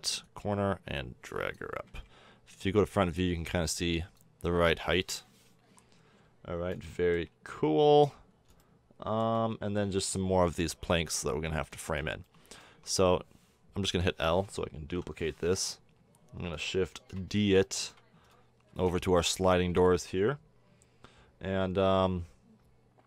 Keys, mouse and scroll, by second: 0.2-0.6 middle drag, 0.6 click, 1.8 KP_1, 4.8 KP_7, 8.6 click, 8.6 middle click, 8.8-10.5 middle drag, 10.5 Tab, 11.7 middle drag, 11.9 middle drag, 12.6 Tab, 13.8 l, 14.9 KP_7, 18.6 shift+d.